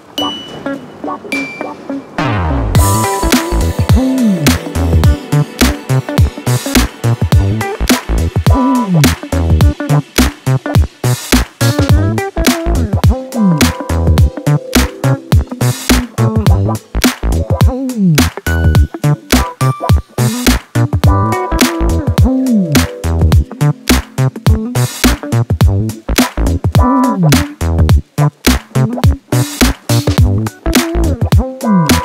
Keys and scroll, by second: 4.7 4, 9.1 2, 11.5 4, 13.6 3, 15.1 ctrl+d, 15.2 Escape, 16.1 ], 19.8 4, 21.4 3, 22.0 4, 23.5 3, 24.6 ctrl+d, 24.8 Escape, 26.7-28.0 typing, 30.1 4.